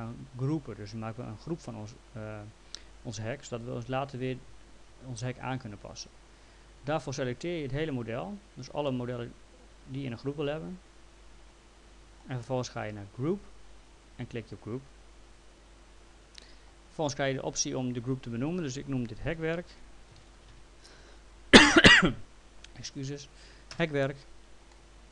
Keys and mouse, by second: 7.2 click, 8.9 middle click, 13.4 click, 15.4 click, 19.3-20.7 typing, 23.8 Return, 24.7 alt+middle click.